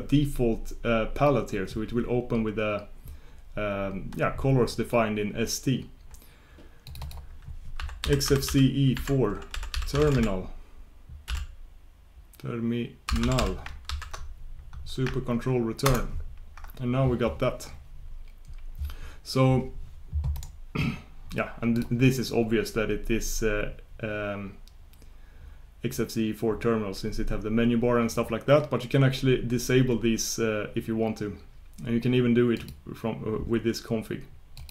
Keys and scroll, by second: 15.8 ctrl+super+Return, 32.7 ctrl+super+Return.